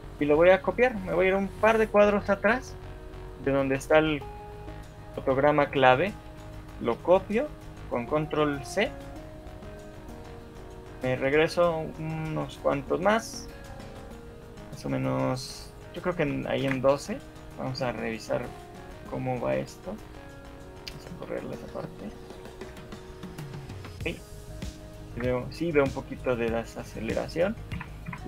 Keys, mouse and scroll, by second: 0.4 Left, 1.0 Right, 1.2 Right, 1.8 Left, 2.0 Left, 9.7 ctrl+c, 9.7 Left, 10.7 Left, 16.7 ctrl+v, 18.9 right click, 21.3 alt+a, 22.3 Escape, 22.9 alt+a, 23.7 Escape, 24.1 alt+a, 25.3 Escape, 26.7 right click, 27.9 Right, 28.1 Right.